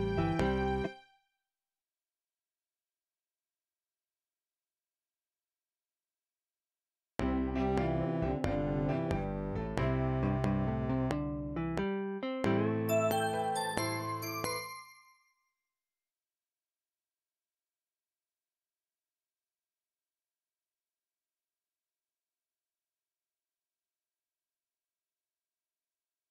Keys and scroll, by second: 0.8 space, 2.2 F5, 7.1 space, 14.6 space.